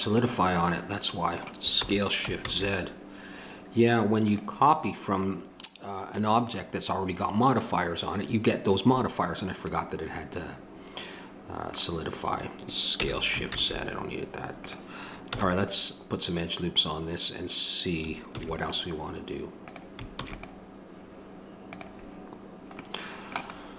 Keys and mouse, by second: 0.1-1.7 drag, 1.7 middle click, 1.8 s, 12.9 s, 15.3 a, 18.3 ctrl+r, 20.1 ctrl+r.